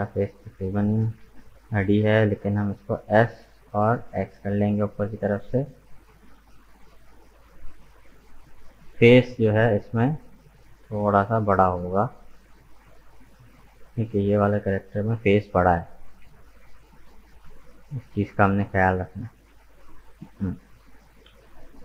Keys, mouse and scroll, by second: 0.2 scroll down 1, 2.9 s, 10.5 g, 14.4 s, 18.8-20.9 middle drag, 20.9-21.2 scroll down 2, 21.2-21.8 middle drag.